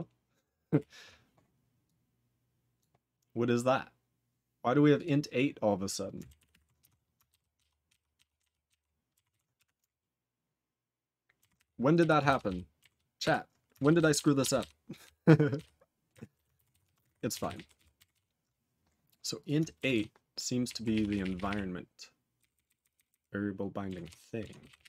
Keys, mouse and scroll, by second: 6.8 q, 7.3 ctrl+/, 7.5 ctrl+/, 7.9 ctrl+/, 8.2 ctrl+/, 8.3 ctrl+/, 8.6 ctrl+/, 9.3 ctrl+s, 11.9 q, 12.3 ctrl+/, 12.4 ctrl+/, 13.2 ctrl+s, 13.8 ctrl+/, 14.0 ctrl+/, 14.1 ctrl+/, 14.4 ctrl+/, 14.6 ctrl+/, 15.0 ctrl+/, 15.6 ctrl+/, 16.1 ctrl+e, 16.3 ;, 16.7 ctrl+s, 16.8 ctrl+a, 16.9 ctrl+space, 17.0 ctrl+e, 17.0 ctrl+g, 17.4 ctrl+s, 17.5 ctrl+p, 17.7 ctrl+n, 18.1 ctrl+s, 19.3 click, 19.4 click, 19.9 ctrl+s, 20.4 s, 20.6 ctrl+p, 20.9 ctrl+p, 21.0 ctrl+p, 21.2 ctrl+p, 21.3 ctrl+p, 21.4 ctrl+p, 22.3 ctrl+n, 22.5 ctrl+n, 22.6 ctrl+n, 22.8 ctrl+n, 22.9 ctrl+n, 23.0 ctrl+n, 24.0 ctrl+s, 24.3-24.8 typing.